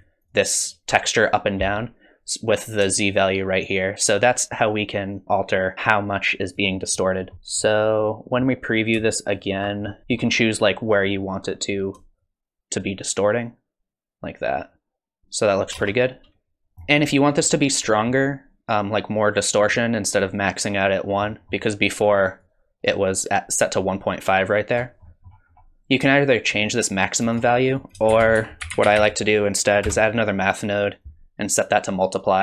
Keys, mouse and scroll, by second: 0.0 ctrl+shift+click, 0.3 click, 0.6 click, 3.1 shift+click, 7.0 middle click, 7.3 middle click, 7.3 scroll down 4, 7.6 middle click, 9.3 ctrl+shift+click, 9.8 middle click, 10.0 middle click, 10.0 scroll up 5, 12.2 shift+click, 15.7 space, 16.7 middle click, 16.7 scroll down 3, 16.7 space, 17.4-18.2 scroll up 5, 17.9 middle click, 21.3 middle click, 22.4 click, 25.0 middle click, 25.5-26.1 scroll up 2, 26.1 shift+click, 27.7 click, 28.1 shift+a, 31.6 click.